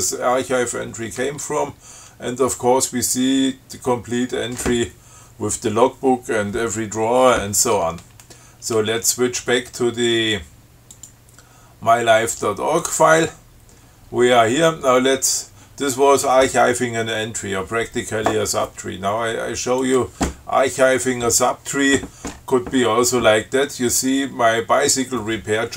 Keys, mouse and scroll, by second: 11.2 click, 13.0 click, 20.0 click.